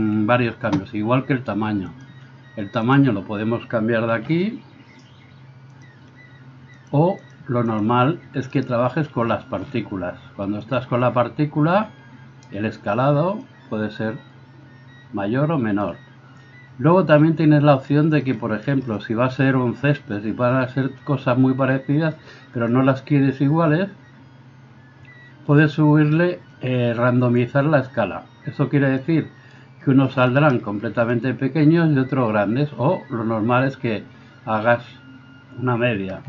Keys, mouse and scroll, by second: 4.2 s, 5.9-6.9 middle drag, 6.9-10.8 drag, 8.5 middle click, 8.5 right click, 10.8-13.5 middle drag, 13.5-36.2 drag.